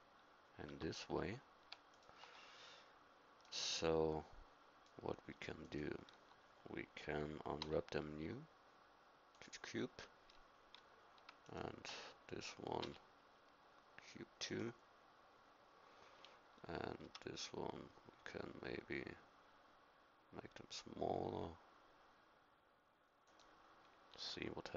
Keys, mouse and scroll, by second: 0.7 Tab, 7.6 u, 12.8 u, 17.0 s, 24.1 g.